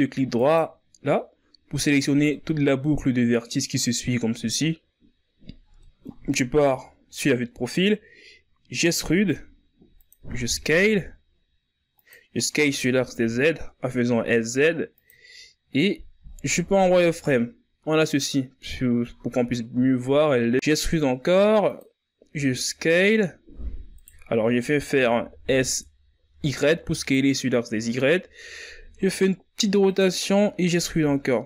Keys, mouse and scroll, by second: 0.9-1.3 scroll up 2, 1.8 alt+right click, 3.5 scroll down 2, 3.8-5.0 middle drag, 5.0-6.4 scroll down 2, 7.3 middle click, 8.1 KP_3, 9.2-10.3 shift+scroll up 4, 10.3 e, 13.9 s, 17.2 scroll up 3, 18.0 z, 18.6-21.8 ctrl+scroll up 2, 22.9 e, 27.4 s, 30.8 r.